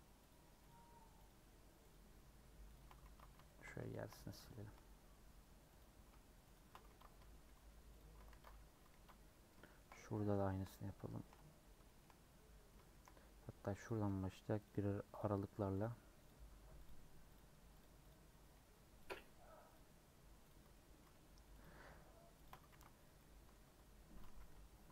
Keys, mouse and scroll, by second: 0.3 alt+shift+click, 0.7 alt+shift+click, 1.2 alt+shift+click, 1.9 alt+shift+click, 2.7 alt+shift+click, 3.0 ctrl+x, 3.4 shift+middle click, 4.0 scroll up 2, 4.4 shift+middle click, 4.7 scroll down 2, 5.8 alt+click, 6.9 ctrl+x, 7.9 alt+click, 8.3 ctrl+x, 8.9 ctrl+z, 9.3 scroll down 1, 9.6 shift+middle click, 9.9 scroll down 1, 10.2 shift+middle click, 10.7-11.0 scroll up 4, 11.0 shift+middle click, 11.8 shift+middle click, 12.0 scroll down 1, 12.4 scroll up 1, 12.9 shift+middle click, 13.8 alt+click, 15.2 alt+shift+click, 15.8 alt+shift+click, 16.2 alt+shift+click, 16.8 alt+shift+click, 17.3 alt+shift+click, 17.8 alt+shift+click, 18.1 alt+shift+click, 19.1 alt+shift+click, 19.7 alt+shift+click, 20.5 alt+shift+click, 20.7 shift+middle click, 21.6 alt+shift+click, 22.4 alt+shift+click, 22.7 ctrl+x, 22.9 scroll down 1, 23.2 middle click, 23.6 Tab, 23.7 scroll down 3, 24.0 Tab, 24.2 a.